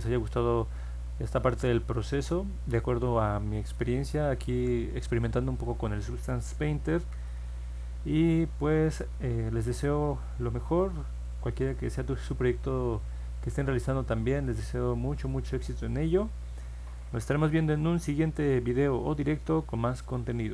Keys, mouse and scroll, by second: 1.5-2.8 alt+middle drag, 4.3 ctrl+s, 14.3 click.